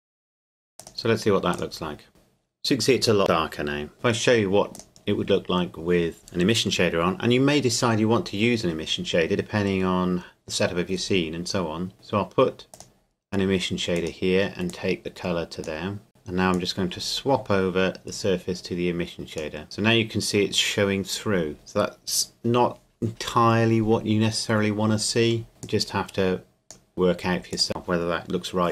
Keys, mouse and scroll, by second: 0.1 ctrl+s, 0.2 Tab, 0.4 shift+click, 6.2 click, 12.7 click, 25.6 click.